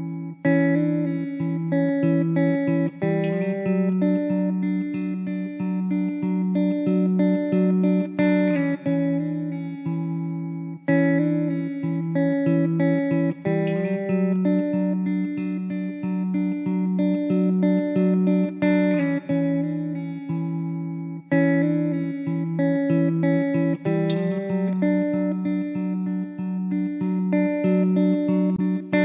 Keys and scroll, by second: 13.0 0, 14.0 0, 14.4 z, 16.5 s, 20.1 0, 21.5 KP_0, 24.1 0.